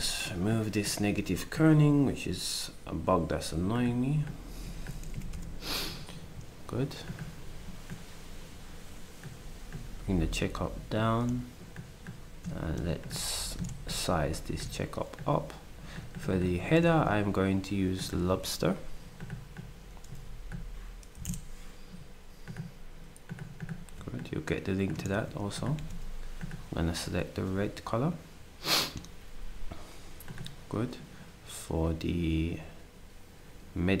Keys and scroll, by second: 5.1 0, 5.3 Return, 16.9 ctrl+a, 20.9-21.7 typing, 25.1 ctrl+d, 25.7 s.